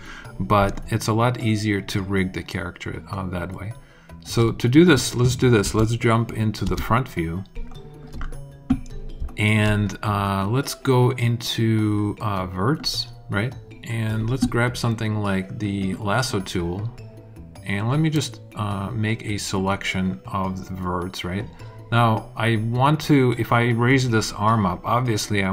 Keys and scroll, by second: 5.6 space, 7.5 alt+space.